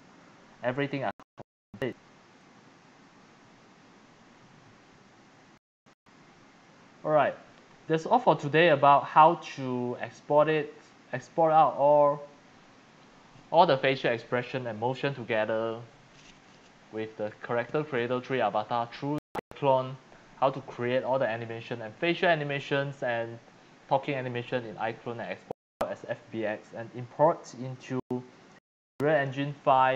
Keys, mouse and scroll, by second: 0.0 Escape, 0.1 Escape, 2.5 click, 8.4 click, 9.0 click, 9.7 click, 10.2-11.9 drag, 15.0 click, 27.6 click.